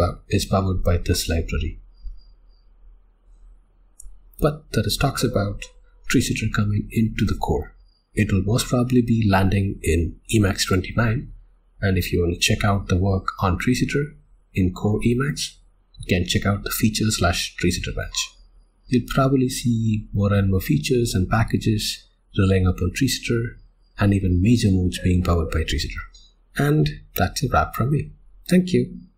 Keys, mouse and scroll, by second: 26.1 w.